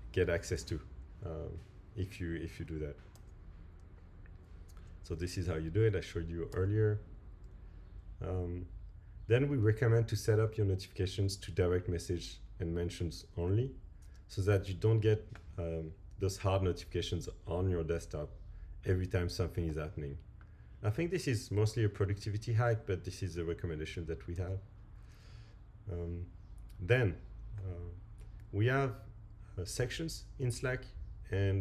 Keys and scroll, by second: 3.1 Right, 6.5 Right, 24.4 Right.